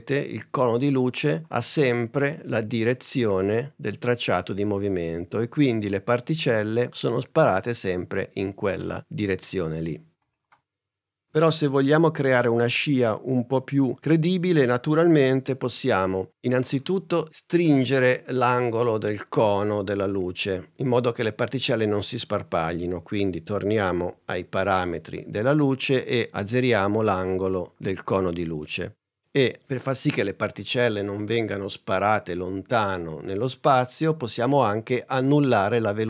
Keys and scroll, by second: 23.8 a.